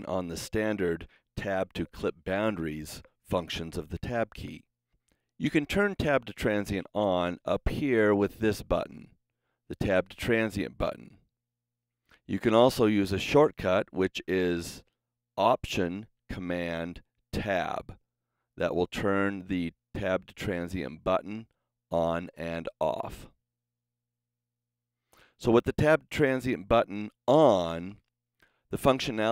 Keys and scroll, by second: 17.3 alt+super+Tab, 27.8 super+s.